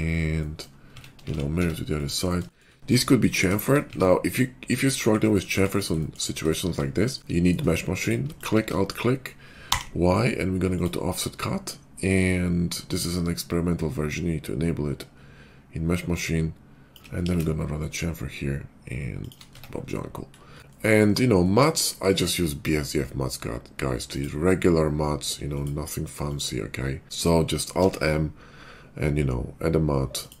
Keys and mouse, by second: 0.9 Tab, 1.3 alt+x, 1.6 Tab, 3.8 Tab, 5.6 shift+middle click, 6.0 shift+middle click, 6.2 middle click, 6.4-8.4 shift+middle drag, 8.4 alt+click, 8.5-14.1 shift+middle drag, 9.6 y, 12.9-19.3 shift+drag, 17.1 ctrl+b, 19.3-20.6 middle drag, 19.4 Tab, 20.7-25.5 middle drag, 25.5 click, 25.7 middle click, 26.3 click, 26.4-27.5 middle drag, 27.0 alt+x, 27.8 alt+m, 27.9-30.4 middle drag.